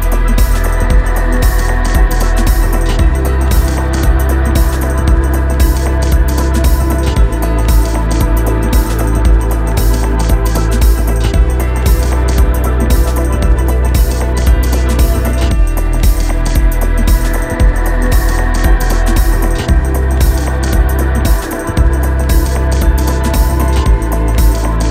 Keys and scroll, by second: 6.4 Escape, 9.4 Escape, 13.6 ctrl+Down, 16.7 Escape, 22.6 ctrl+Up.